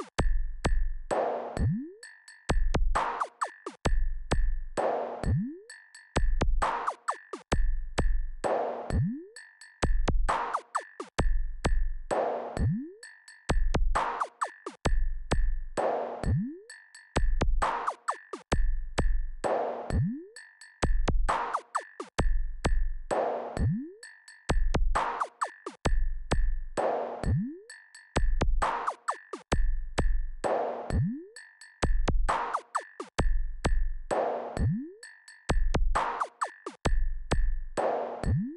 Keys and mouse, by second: 0.5-3.7 right drag, 6.3-7.7 drag, 8.9 KP_4, 9.3 KP_4, 12.4 KP_0, 17.7-21.3 drag, 22.9 click, 24.2-25.9 drag, 26.4-28.3 drag, 28.9 click, 30.9-32.2 drag.